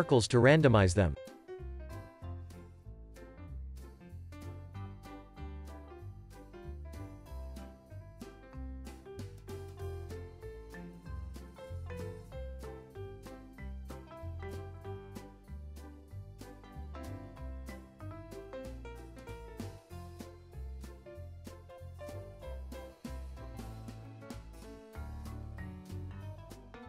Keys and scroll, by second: 10.8 space, 15.2 space, 15.6 super+s.